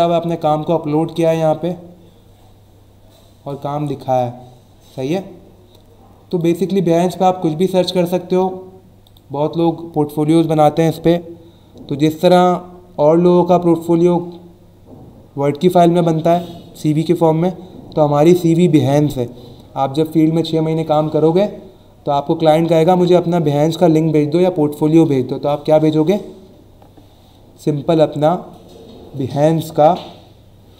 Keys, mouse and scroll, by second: 1.4-2.2 scroll down 2, 2.8-3.2 scroll down 2, 3.8 scroll down 1, 4.6 scroll down 1, 6.3 click, 7.0 scroll up 1, 9.0 click.